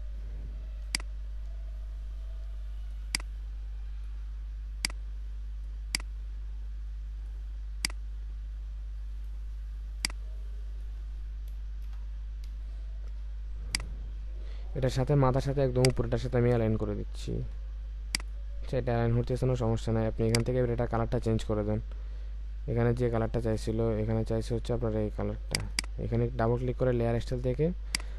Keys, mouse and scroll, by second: 0.8 alt+click, 11.8 Return, 13.7 ctrl+click, 17.3 ctrl+z, 23.7-24.1 alt+scroll down 1, 25.7 double click.